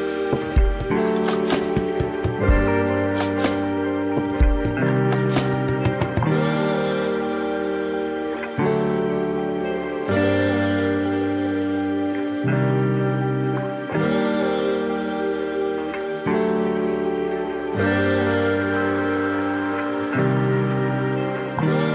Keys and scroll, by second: 0.1 ctrl+=, 0.2 ctrl+-, 1.2 ctrl+=, 8.4 space.